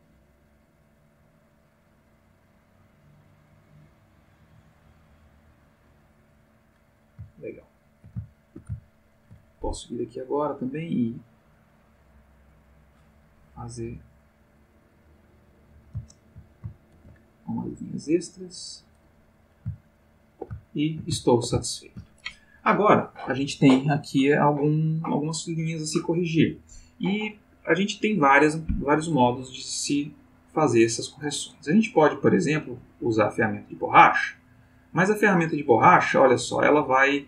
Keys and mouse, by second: 7.5 ctrl+middle click, 8.2-9.5 ctrl+shift+middle drag, 10.4-13.0 drag, 14.2-16.1 drag, 16.1 ctrl+\, 16.9 ctrl+z, 17.6-19.0 ctrl+drag, 19.9-22.2 ctrl+middle drag, 33.2 click, 34.2-36.8 drag, 36.9-37.2 ctrl+middle drag.